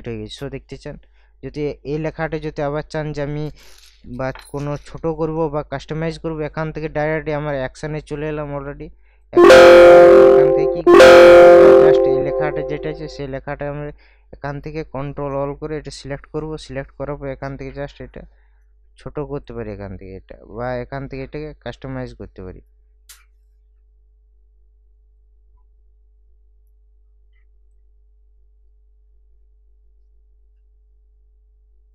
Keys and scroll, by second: 4.5 ctrl+t, 15.8 ctrl+a.